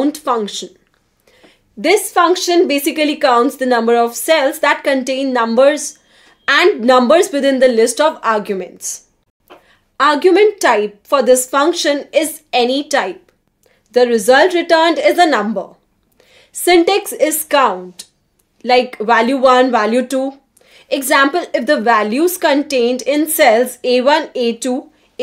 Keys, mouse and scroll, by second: 9.0 BackSpace, 9.5 Return, 10.6 click, 16.0 click, 17.2 5, 17.6 Return, 18.8-21.5 typing, 19.2 Return, 22.7 Return, 23.2-25.2 typing.